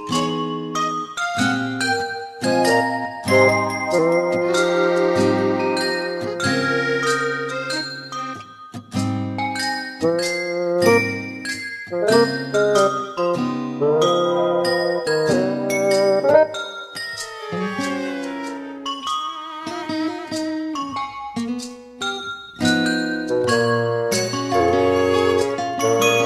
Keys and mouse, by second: 2.6 middle click, 3.7 middle click, 6.0 middle click, 16.0 middle click, 18.6 middle click, 20.0 middle click, 22.1 middle click, 25.4 middle click, 26.1 middle click.